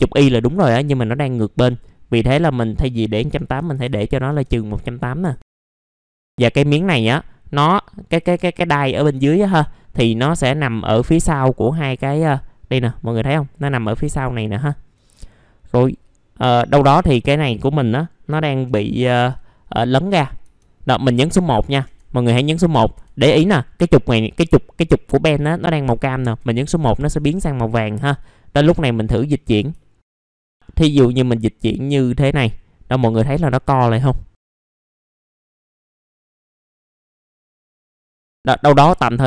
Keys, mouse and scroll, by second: 3.6 KP_1, 5.4 alt+middle click, 5.7 middle click, 6.0-8.3 drag, 8.4 alt+middle click, 9.3 scroll down 1, 9.9 middle click, 10.8 middle click, 11.2 alt+middle click, 11.9-12.2 scroll up 1, 13.8 middle click, 13.9 scroll down 1, 14.2 alt+middle click, 15.2 alt+middle click, 19.5-20.4 scroll down 1, 21.8 1, 24.3 scroll up 1, 25.7 scroll down 1, 28.2 click, 29.8 alt+middle click, 31.2-36.7 drag, 36.8 alt+middle click, 37.1 middle click, 37.3 click, 38.1 alt+middle click.